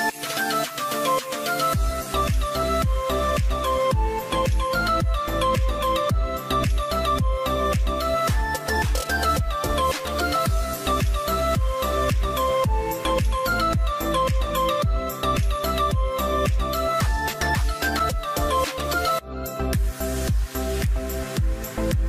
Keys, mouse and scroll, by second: 6.5-8.6 scroll down 1, 10.2 double click, 16.6-18.8 drag, 19.0-20.0 scroll down 1, 20.0 scroll down 1, 20.3 double click, 20.4 5, 20.6 0, 20.8 0, 20.9 Return.